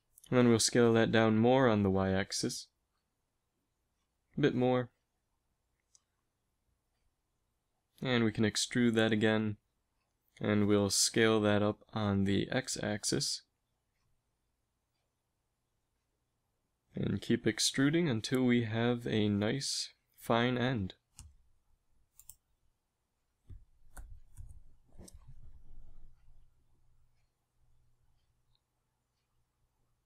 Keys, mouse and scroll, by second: 1.1 s, 8.6 e, 12.8 KP_1, 15.4 s, 17.3 e, 20.9 s, 23.7 e, 25.1 s.